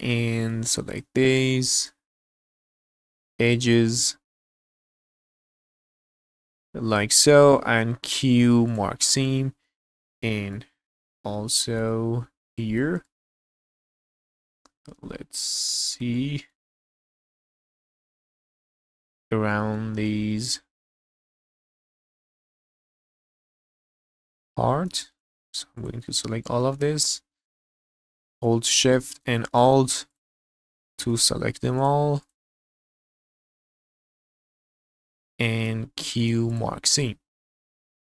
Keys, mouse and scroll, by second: 0.3 middle click, 0.9 alt+click, 1.8 alt+shift+click, 2.3 middle click, 3.5 alt+shift+click, 3.8 scroll down 1, 4.0 middle click, 4.4 shift+middle click, 4.5 scroll up 1, 4.8 alt+shift+click, 4.9 middle click, 5.3 alt+shift+click, 5.4 middle click, 5.7 shift+middle click, 6.0 alt+shift+click, 6.1 alt+shift+click, 6.2 scroll down 1, 6.3 middle click, 6.9 alt+shift+click, 7.3 middle click, 8.0 q, 9.2 middle click, 10.2 scroll down 1, 10.5 middle click, 11.2 scroll up 3, 11.5 shift+middle click, 12.5 alt+click, 13.0 shift+middle click, 13.5 middle click, 14.6 middle click, 15.7 shift+middle click, 16.1 middle click, 16.9 shift+middle click, 17.3 middle click, 17.7 shift+middle click, 18.5 alt+shift+click, 19.0 middle click, 20.4 alt+shift+click, 21.0 shift+middle click, 21.6 middle click, 22.0 scroll up 1, 22.2 shift+middle click, 22.8 alt+shift+click, 23.4 alt+shift+click, 23.7 scroll down 1, 23.9 middle click, 24.7 scroll up 1, 24.9 shift+middle click, 25.8 alt+shift+click, 26.1 scroll down 2, 26.4 shift+middle click, 26.9 scroll up 2, 27.7 alt+shift+click, 28.1 alt+shift+click, 28.6 middle click, 29.3 shift+middle click, 30.1 alt+shift+click, 30.4 scroll down 1, 30.6 shift+middle click, 31.2 scroll up 1, 31.8 alt+shift+click, 32.2 alt+shift+click, 32.6 scroll down 1, 32.8 middle click, 33.4 shift+middle click, 34.1 alt+shift+click, 34.4 scroll down 2, 34.6 shift+middle click, 35.3 scroll up 1, 35.3 middle click, 36.0 q, 36.8 scroll down 2, 37.0-38.0 middle drag.